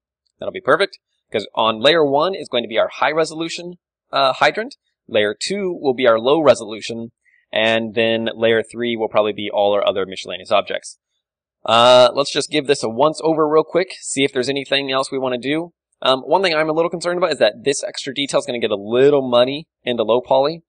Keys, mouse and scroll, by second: 0.6-3.7 middle drag, 0.8 z, 1.1 a, 2.0 KP_1, 6.3-10.4 middle drag, 10.8-17.9 middle drag, 17.7 d, 17.9-19.8 drag, 18.8-19.7 typing, 19.8 right click, 20.0 click, 20.4 Tab, 20.4-20.6 middle drag.